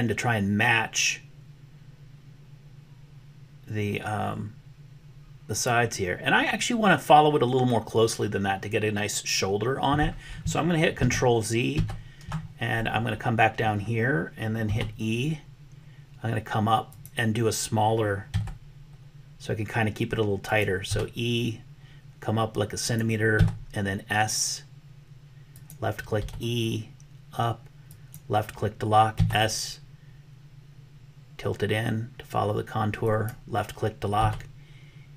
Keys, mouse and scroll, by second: 10.9 ctrl+z, 11.9 ctrl+z, 14.6 e, 18.4 s, 20.9 e, 23.5 s, 26.2 e, 29.3 s, 34.2 e.